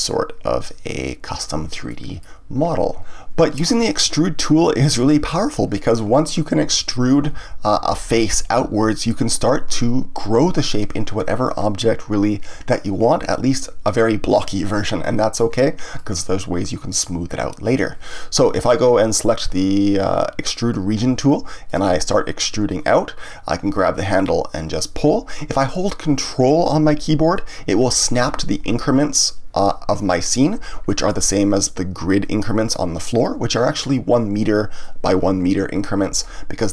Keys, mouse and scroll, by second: 0.9-1.9 drag, 1.9-3.1 middle drag, 4.3 ctrl+z, 11.6-14.3 scroll down 1, 14.3-19.9 middle drag, 20.5 click, 21.6 click, 22.9-25.9 drag, 30.8-33.9 middle drag.